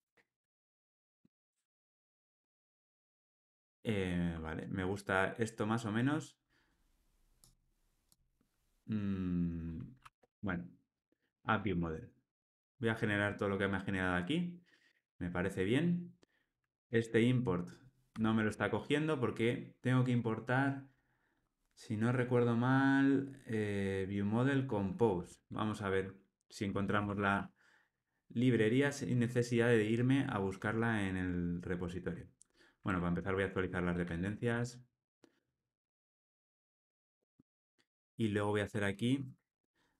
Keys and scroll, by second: 12.3 Tab, 16.9 alt+Return, 33.2 alt+Return.